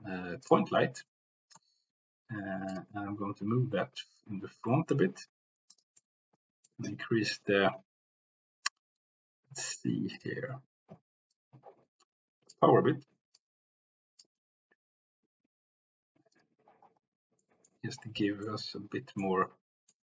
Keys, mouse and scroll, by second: 1.1-1.7 middle drag, 3.1 g, 4.8 y, 5.7 click, 6.2 middle click, 10.1 click, 11.5-12.6 drag, 13.4 click, 14.5 g, 16.3 drag, 17.3 middle click, 18.5 middle click, 19.3-20.0 middle drag.